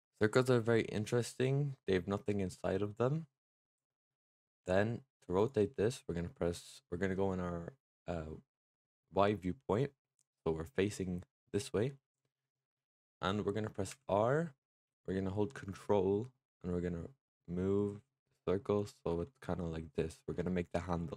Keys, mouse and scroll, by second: 0.2-1.3 drag, 5.2 click, 13.8 r, 19.1-21.1 middle drag.